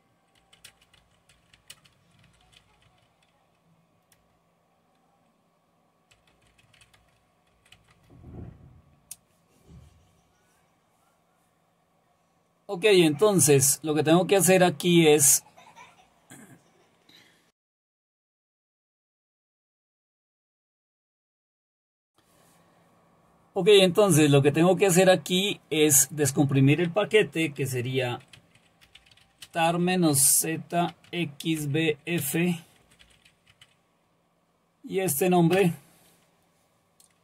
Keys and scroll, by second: 0.0-4.7 typing, 5.9-8.0 typing, 28.4-33.7 typing, 35.5 Return, 35.8 typing.